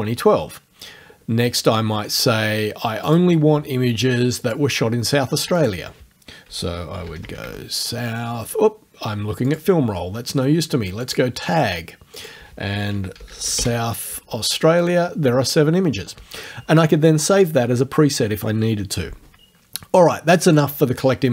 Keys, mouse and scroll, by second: 3.1 click, 4.4 click, 5.6 click, 6.6-8.0 typing, 9.5 click, 11.0 click, 12.2 click, 12.8-14.1 typing, 14.8 click, 20.5 click.